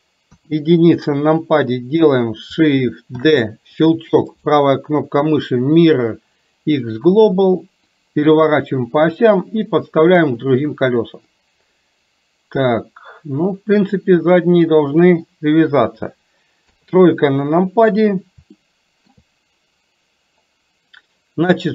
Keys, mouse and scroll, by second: 0.3 KP_1, 3.2 shift+d, 4.6-7.1 right drag, 8.1-10.4 drag, 11.4-15.3 middle drag, 16.7 KP_3, 18.7 shift+middle click.